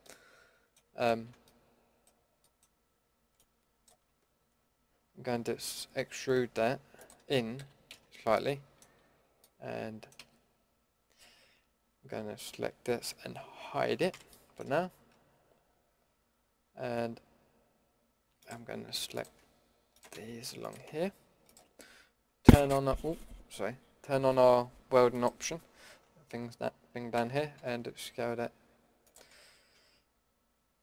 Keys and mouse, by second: 1.1 ctrl+z, 1.8 middle click, 3.3-6.1 drag, 4.4 ctrl+z, 6.1 e, 7.6 KP_Decimal, 7.9 z, 9.0 z, 10.2 a, 12.1 l, 14.1 h, 18.4-19.9 drag, 27.1 s, 29.6 ctrl+z.